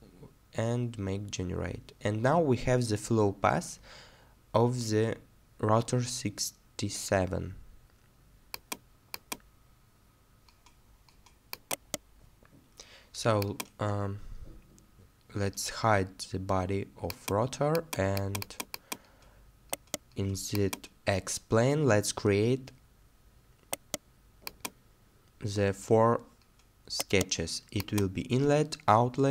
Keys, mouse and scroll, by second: 11.7 middle click, 11.7 right click, 14.0 middle click, 19.7 right click, 23.7 right click, 27.0 right click.